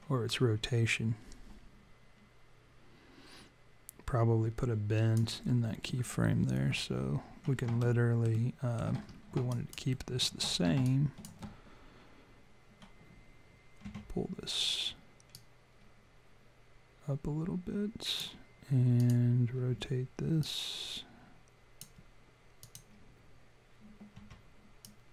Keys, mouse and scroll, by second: 7.8 alt+middle click, 9.1-9.9 scroll up 2, 9.5 alt+click, 9.9 alt+middle click, 10.8 alt+click, 13.8 w, 15.3 click, 18.9 click, 19.6 e, 20.4 click, 22.6 click, 24.1 w, 24.8 click.